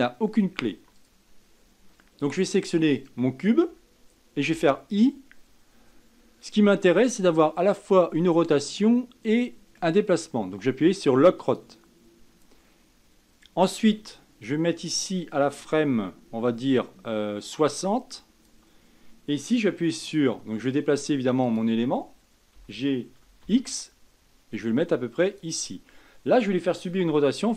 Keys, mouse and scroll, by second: 0.9 ctrl+z, 1.2 click, 3.2 click, 15.5-18.6 drag, 21.7 click, 22.8 g.